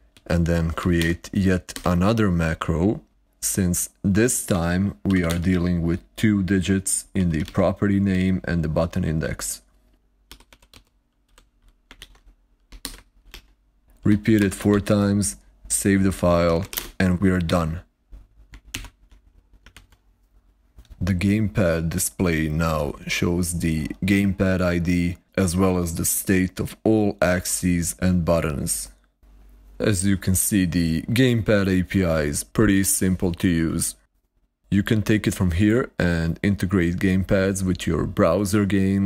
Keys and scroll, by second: 0.0-1.3 typing, 4.1-5.8 typing, 6.8-7.9 typing, 9.1 ctrl+a, 10.0-11.6 typing, 11.8 ctrl+a, 13.1 ctrl+q, 13.8-15.1 typing, 16.1-17.0 typing, 19.1 ctrl+Left, 19.6 super+r.